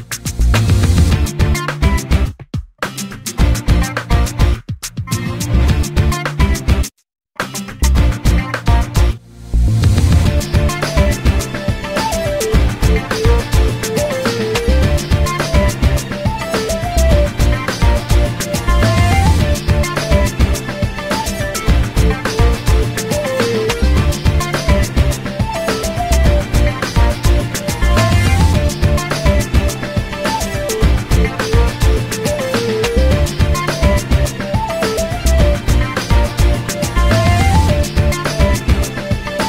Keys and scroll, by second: 4.8 Escape, 12.4 e, 15.4 l, 32.1 p.